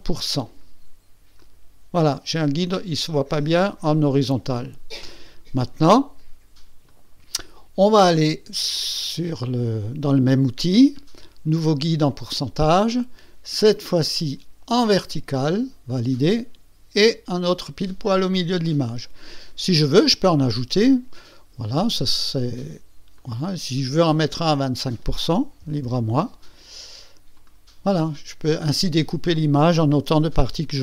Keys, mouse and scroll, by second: 1.4 click, 6.9 click, 12.1 click, 13.6 click, 14.8 click, 15.9 click, 21.1 click, 23.2 click, 24.5 click, 25.6 KP_2, 25.9 KP_5, 26.5 KP_5, 27.3 click.